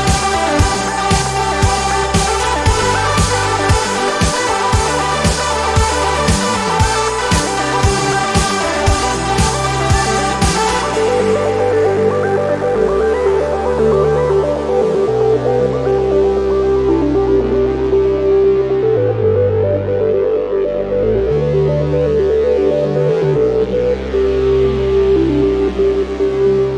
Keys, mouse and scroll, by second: 1.4 click, 3.0 click, 5.1 click, 5.9 click, 6.9 KP_5, 7.2 KP_Enter, 8.5 click, 10.0-10.5 ctrl+scroll up 2, 11.4 click, 12.7 click, 14.1-16.1 drag, 17.6 click, 17.7-18.8 scroll up 1, 18.8 scroll up 1, 19.1-20.1 drag, 20.4 ctrl+a, 20.9 ctrl+click, 22.5-24.0 drag, 24.2 ctrl+y, 24.6 ctrl+click, 25.3 ctrl+click, 26.0 ctrl+click.